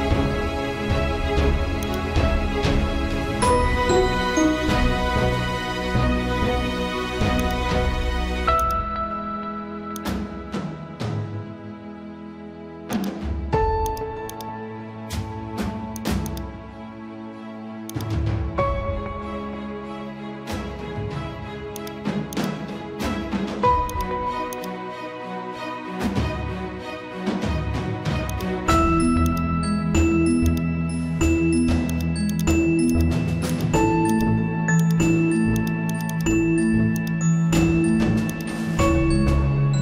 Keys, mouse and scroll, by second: 31.3 click, 37.3 click.